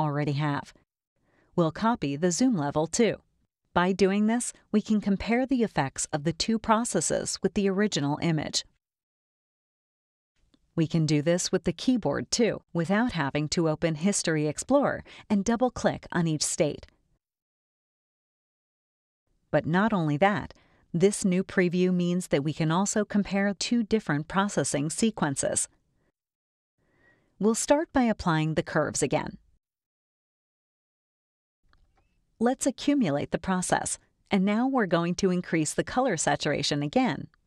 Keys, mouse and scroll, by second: 2.0 click, 7.4 click, 8.1 click, 8.7 click, 10.1 click, 10.7 click, 13.9 ctrl+Right, 14.7 ctrl+Left, 15.6 ctrl+Right, 16.4 ctrl+Left, 17.3 ctrl+Right, 18.2 ctrl+Left, 25.0 click, 28.7 click, 30.9 click, 33.3 click.